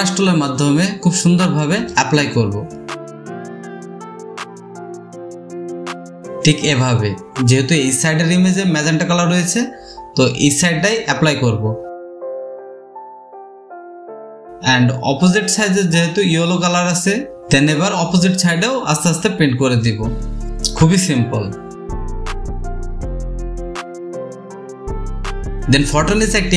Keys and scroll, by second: 3.5-3.9 typing, 5.9-7.9 typing, 10.9 typing, 12.6-14.5 typing, 14.2 ctrl+z, 16.0 space, 16.9 space, 21.4 space, 21.4 space, 24.1 space.